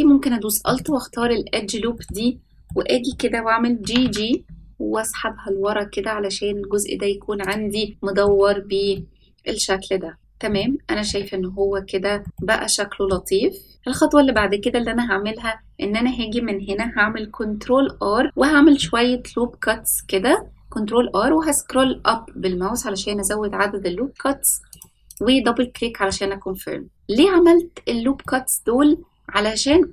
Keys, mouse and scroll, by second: 0.7 alt+click, 1.9 middle click, 2.3-2.6 scroll down 1, 2.6 middle click, 3.1-3.7 scroll down 1, 3.7 g, 7.9 middle click, 8.9-10.2 middle drag, 10.2 scroll down 1, 10.5 shift+middle click, 11.5-12.0 scroll up 2, 12.2 shift+middle click, 12.3 middle click, 13.9 middle click, 17.4 ctrl+r, 25.7 middle click, 27.7-28.2 scroll down 2, 28.2-29.6 middle drag.